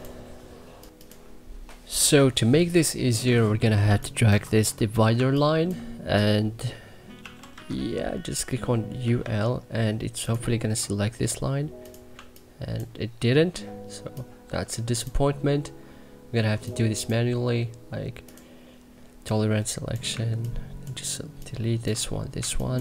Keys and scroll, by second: 3.0 c, 3.6 2, 4.0 1, 4.9 2, 6.9 u, 7.2 l, 8.5-9.4 typing, 11.9 2, 22.1 1, 22.5 2.